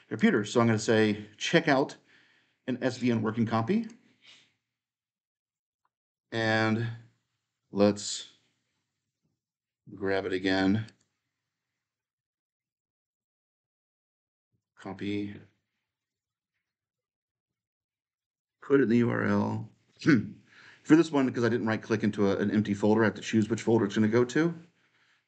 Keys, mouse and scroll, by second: 0.0 click, 3.6 click, 5.8 right click, 8.8 click, 10.8-12.7 drag, 12.8-14.4 right drag, 14.4-18.5 drag, 18.5 right click, 19.4 click, 23.2 click.